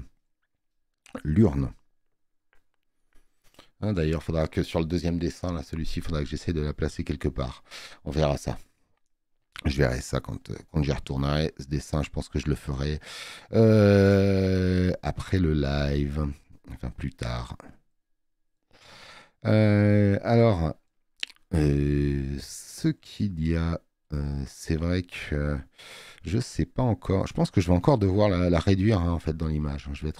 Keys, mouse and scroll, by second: 14.1 click, 25.2 space, 25.4 click, 27.8 space, 27.9 click, 28.8 alt+scroll up 2.